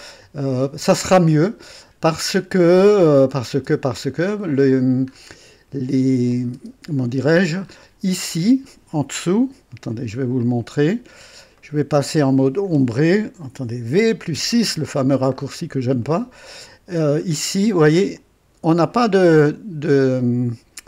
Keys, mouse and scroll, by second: 0.2 right click, 3.1 click, 3.5 space, 3.6 space, 4.3-5.4 scroll up 2, 6.3 click, 6.5 space, 7.0-7.3 scroll down 1, 7.6 scroll up 1, 9.2 click, 9.8 right click, 10.4 click, 11.6 right click, 14.0 v, 14.3 KP_6, 15.3-15.7 scroll up 1, 16.0-17.5 right drag, 18.2-19.4 drag, 18.4 typing.